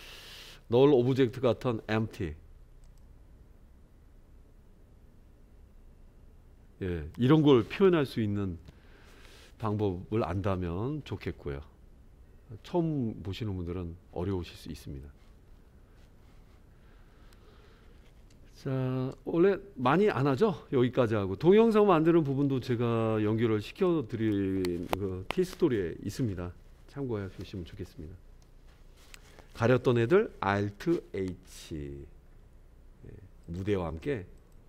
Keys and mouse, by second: 3.1 click, 19.1 space, 20.1-23.9 drag, 29.1 click, 31.1 alt+h, 33.4 click, 34.4 click.